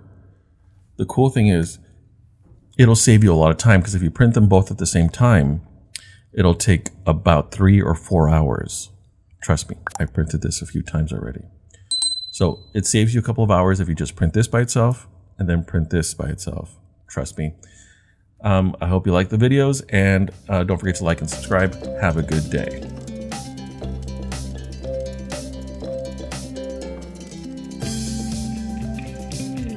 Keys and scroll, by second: 1.7 d.